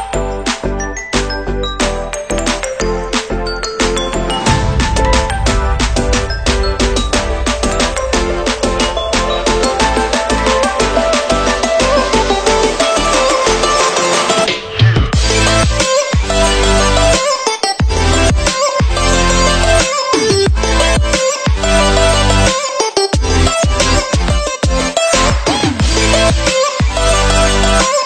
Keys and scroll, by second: 3.9 Delete, 9.0 ctrl+0, 19.3 Delete.